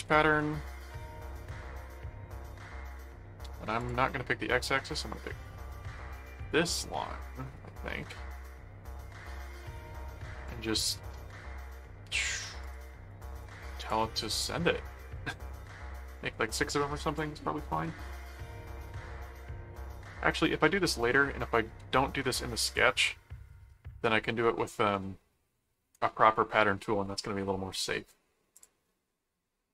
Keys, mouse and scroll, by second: 0.0-0.6 typing, 1.5 Return, 3.8 click, 6.4 click, 12.6-14.4 drag, 17.1 click, 22.7 click, 24.4 middle click, 25.9 middle click, 28.5 click.